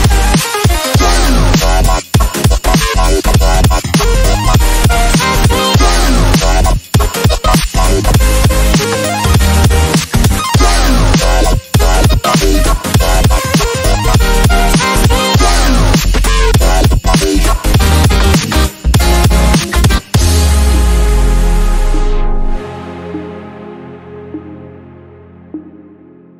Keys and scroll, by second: 16.9 ctrl+a, 19.3 ctrl+c, 21.8 ctrl+v, 23.4 v.